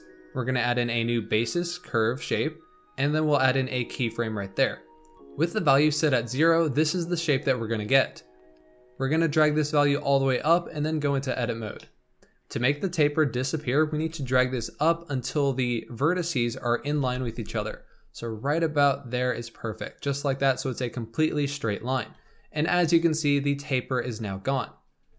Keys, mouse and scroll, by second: 0.7-1.9 drag, 1.9-3.1 scroll down 4, 3.1-5.1 drag, 5.1 scroll down 4, 9.3-11.0 drag, 11.0 Tab, 11.7 shift+middle click, 13.8 g, 16.9 g, 22.0 Tab.